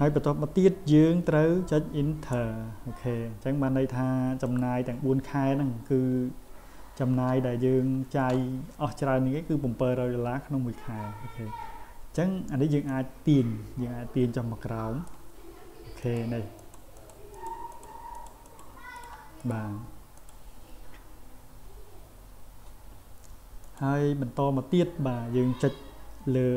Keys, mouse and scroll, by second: 4.4 click, 12.9-15.1 drag, 16.0 click, 16.6 click, 17.0 click, 17.3 click, 17.7 click, 18.2 click, 18.4 click, 19.0 click, 19.4 click, 20.2 click, 23.7 click.